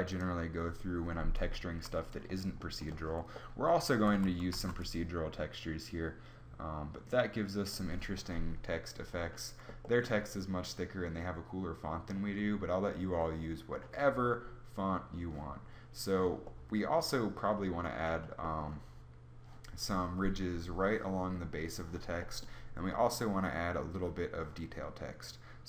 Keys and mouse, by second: 3.8 z, 4.4 z.